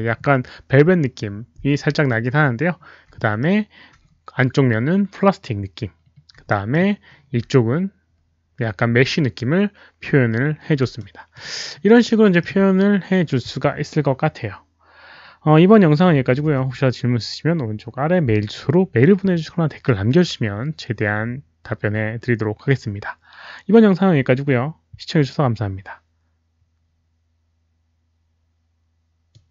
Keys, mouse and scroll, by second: 0.3 alt+middle click, 2.6 scroll down 1, 3.1 alt+middle drag, 4.0 scroll up 1, 4.8-5.1 scroll down 1, 5.9 scroll down 1, 6.4 alt+middle drag, 7.6-8.0 scroll down 1, 8.0-9.0 scroll up 1, 10.9-11.3 alt+middle drag, 11.6 alt+scroll down 1, 12.0-12.3 alt+middle drag, 12.6-12.9 scroll down 1, 13.9 alt+middle click, 16.3 alt+middle click, 17.2 alt+middle click, 21.7 alt+middle click, 29.3 click.